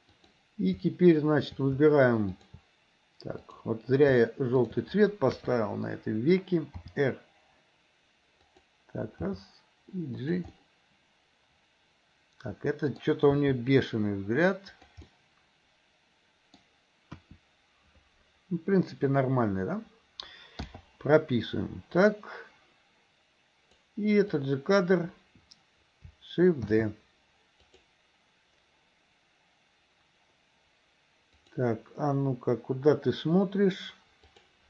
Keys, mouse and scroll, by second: 0.2 click, 2.4 shift+click, 3.4 click, 5.4 KP_3, 6.9 r, 9.3 g, 10.6-13.1 middle drag, 13.3 g, 15.1-17.2 middle drag, 17.2 KP_1, 22.1-23.9 drag, 24.4-24.9 drag, 26.8 shift+d, 31.4 click, 34.4 click.